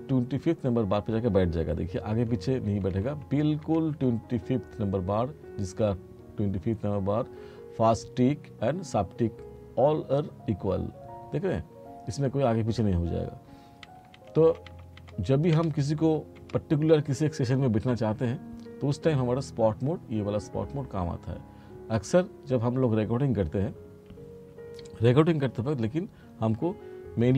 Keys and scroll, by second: 2.2 t, 13.9 r.